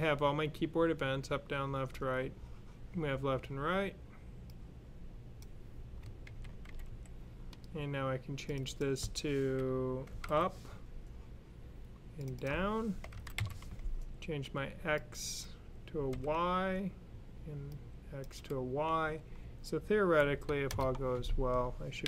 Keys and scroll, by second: 6.1 super+c, 6.5 super+v, 6.7 super+v, 10.0 typing, 12.6-13.4 typing, 15.7-16.5 typing, 21.9 Up.